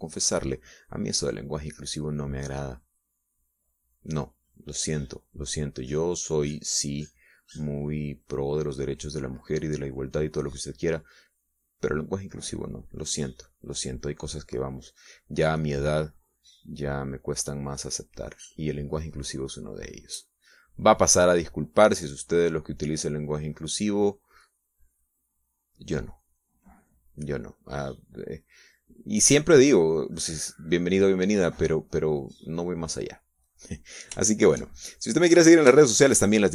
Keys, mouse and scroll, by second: 3.6-5.5 drag, 10.9 click, 12.1-15.4 drag, 15.5 middle click, 16.4 middle click, 17.3 click, 27.0 click, 27.9-33.0 drag, 34.9 middle click, 35.9 shift+click.